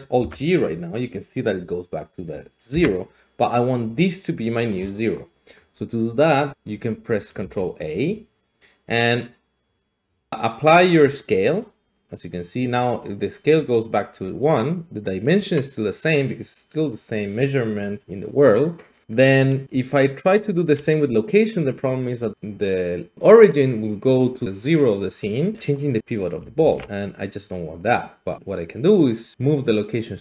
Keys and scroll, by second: 0.2 alt+g, 2.7 ctrl+z, 6.5 a, 7.4 ctrl+a, 19.0 ctrl+a, 26.6 ctrl+a.